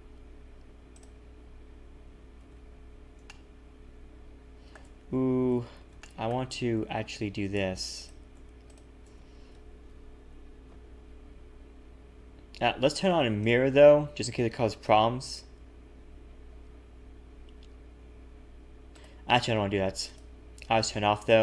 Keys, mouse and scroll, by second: 0.9 click, 2.4 a, 2.5 a, 2.6-3.1 scroll down 1, 3.1 scroll down 2, 3.2 shift+middle click, 5.1 ctrl+z, 5.5 ctrl+z, 6.0 shift+middle click, 6.7 a, 8.0 a, 8.0 click, 8.7 alt+shift+click, 9.9 ctrl+KP_Add, 10.3 ctrl+KP_Add, 10.3 ctrl+KP_Subtract, 13.6 click, 14.5 g, 20.1 click, 20.9 g.